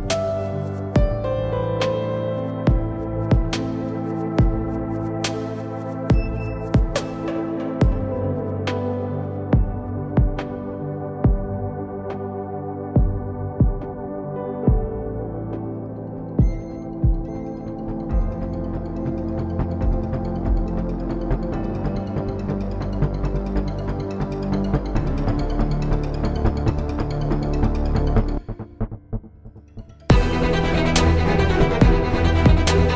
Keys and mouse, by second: 0.7 z, 4.8 z, 5.7 x, 7.1 z, 7.5 z, 9.8 z, 10.7 x, 11.3 z, 13.3 KP_7, 13.9 z, 16.4 z, 17.2 Tab, 17.7 ctrl+Tab, 18.3 z, 18.7 c, 20.9 shift+d, 22.8 ctrl+z, 23.9 shift+d, 25.7 s, 29.6 s, 31.6 z.